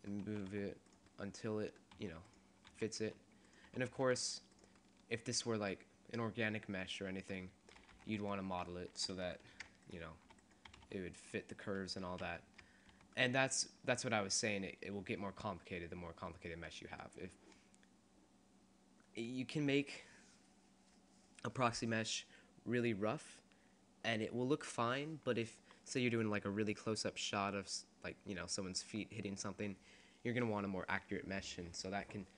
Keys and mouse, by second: 0.4 s, 2.2 s, 2.8 s, 3.8 s, 6.3 middle click, 8.1 middle click, 8.1 Tab, 9.7 ctrl+r, 10.7 s, 12.3 ctrl+z, 12.9 Tab, 18.7-20.1 middle drag, 22.8-24.1 middle drag.